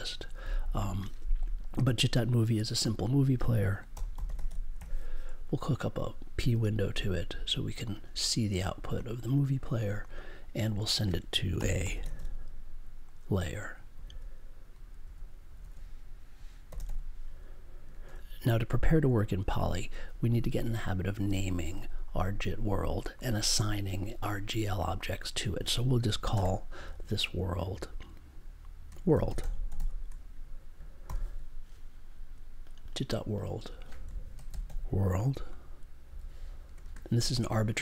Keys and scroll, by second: 3.6-5.2 typing, 6.5 w, 11.3-12.6 typing, 13.9 g, 18.0 super+j, 26.3 space, 28.8-29.7 typing, 31.0 super+j, 34.3 shift+w, 36.0 shift+l, 36.8 space.